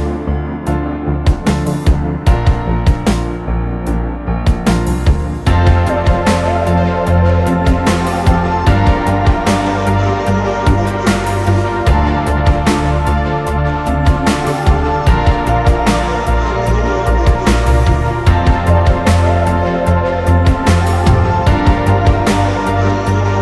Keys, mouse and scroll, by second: 0.2-2.2 typing, 1.8 middle click, 2.0 middle click, 2.5 Delete, 2.8 middle click, 3.1 middle click, 3.3 middle drag, 3.8-4.1 middle drag, 4.8 click, 5.2 t, 5.3 click, 7.8 middle click, 8.2 click, 8.5 r, 9.2 space, 9.3 r, 10.2-11.3 drag, 11.0-13.6 typing, 13.1 click, 15.0-16.7 typing, 17.4 Delete, 17.8 Delete, 18.2 Delete, 18.7 Delete, 19.0 m, 19.2 scroll up 1, 19.6 scroll down 1, 21.4 ctrl+z, 21.4 ctrl+z, 21.7 space, 22.0 Delete, 22.3 Delete, 23.0 m.